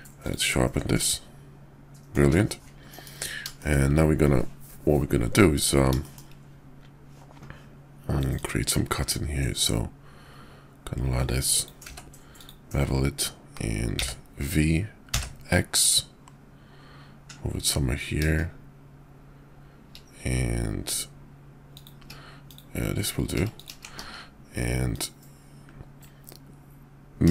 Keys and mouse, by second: 0.9-2.1 drag, 2.2 `, 2.9 KP_5, 3.6 shift+click, 5.9 shift+middle drag, 8.3-12.5 drag, 23.9 alt+x.